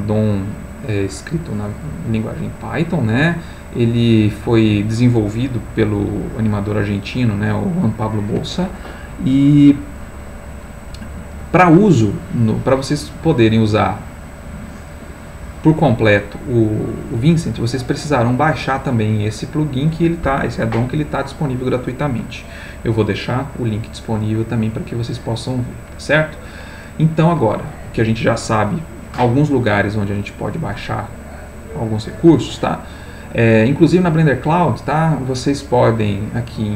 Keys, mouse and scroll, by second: 0.1-0.9 scroll down 1, 1.1-1.6 scroll down 1, 3.5-4.4 scroll down 1, 12.1-12.4 scroll up 1, 13.2 click, 14.2 click, 18.3 click, 33.7 click, 36.2 click.